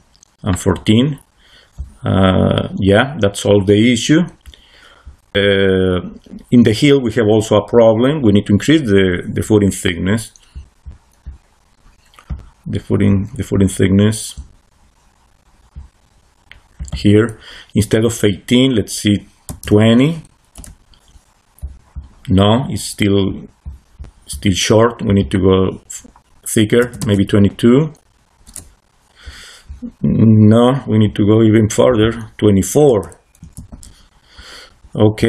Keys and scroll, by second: 19.1-20.0 typing, 20.4 Return, 26.7 2, 27.1 \, 28.3 Return, 32.8 2, 33.3 4, 33.6 Return.